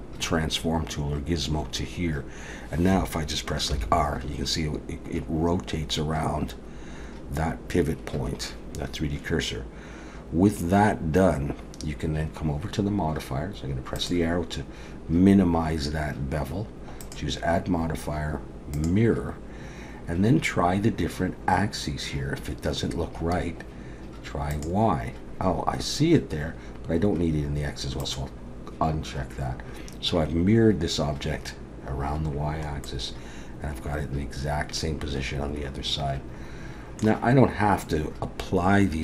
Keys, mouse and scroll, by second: 3.7 r, 14.0 click, 24.5 click, 28.0 click, 32.9 middle click.